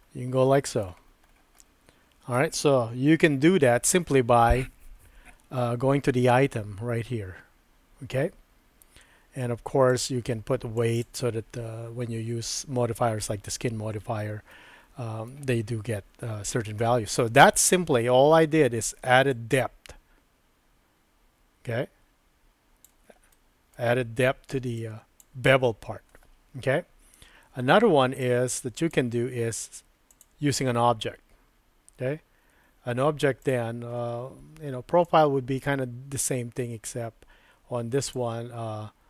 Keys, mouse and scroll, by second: 1.6 middle click, 3.1 super+z, 10.0-11.0 drag, 14.5 middle click, 19.3-22.8 drag, 23.3 middle click, 24.8 click, 28.2 click, 30.1 click, 33.4 click, 35.0-38.2 drag.